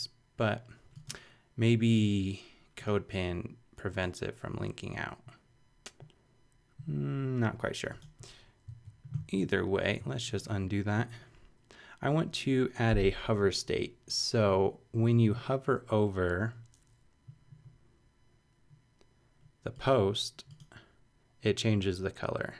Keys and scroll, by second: 8.7 super+z.